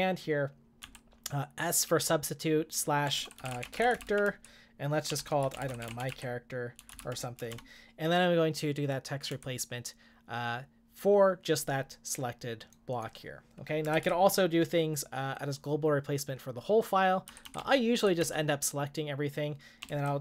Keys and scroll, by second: 0.6-8.0 typing, 9.3 Return, 13.9 Escape, 14.0 u, 17.3-18.7 typing, 19.9 shift+;.